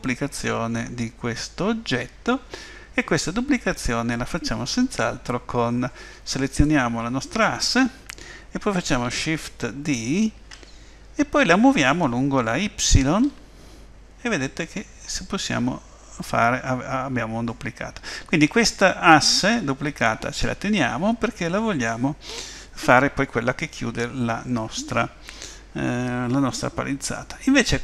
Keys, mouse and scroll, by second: 6.5 click, 10.4 shift+d.